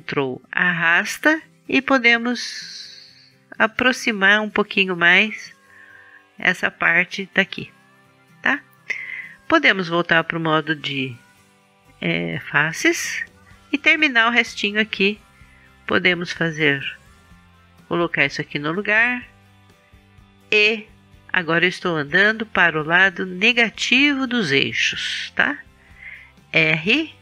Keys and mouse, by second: 1.9-3.8 drag, 3.8 middle click, 4.3-8.2 drag, 8.2-11.0 middle drag, 11.0-12.6 drag, 12.9-14.2 middle drag, 17.5 middle click, 17.9-19.8 drag, 19.8-20.8 middle drag, 20.8 e, 26.8 e.